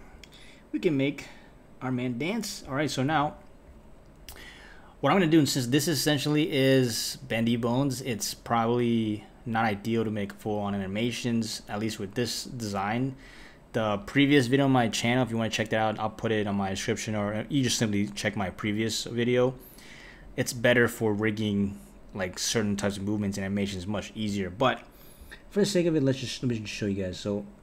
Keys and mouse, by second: 0.5 middle click, 3.1 KP_1, 27.1 click.